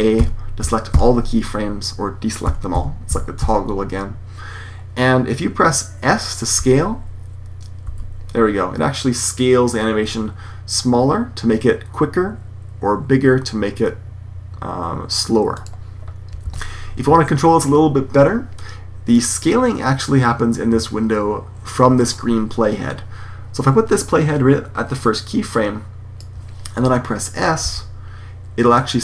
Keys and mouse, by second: 7.8 s, 16.3 super+z, 19.1-20.9 drag, 27.5 s.